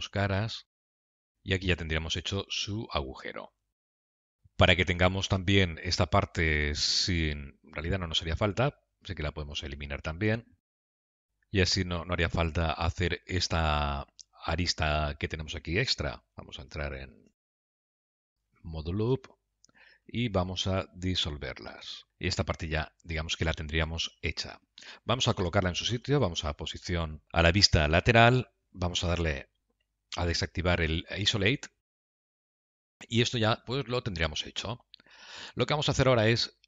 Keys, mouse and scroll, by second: 0.1 x, 1.2 shift+z, 1.6 middle click, 4.1 middle click, 8.6 middle click, 10.0 click, 10.9 x, 12.5 middle click, 16.3 click, 16.3 q, 17.0 F2, 18.0 2, 18.1 click, 18.4 q, 20.4 x, 22.2 middle click, 26.8 KP_3, 31.3 KP_3, 32.5 scroll down 4, 32.9 shift+middle click, 33.9 middle click.